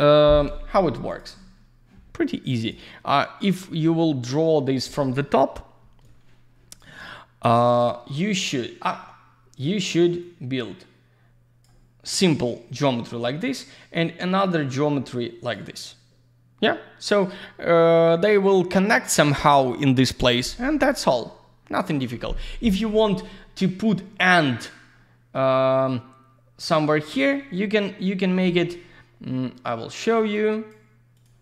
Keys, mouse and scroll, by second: 1.1 click, 2.6 click, 6.0 click, 7.4 click, 10.2 click, 13.9 click, 29.9 click, 30.0 click, 30.3 click, 31.1 click, 31.2 click.